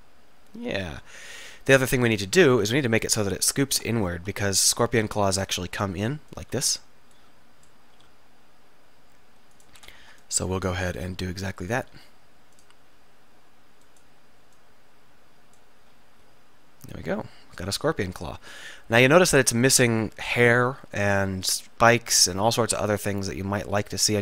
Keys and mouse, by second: 1.5 KP_7, 1.8 KP_7, 1.9 KP_1, 2.3 KP_3, 4.3 z, 4.3 a, 4.7 b, 8.0 r, 8.2 r, 9.6 r, 9.9 r, 10.1 a, 11.2 b, 12.0 r, 13.7 r, 15.9 z, 16.9-18.1 drag, 18.1-19.1 middle drag.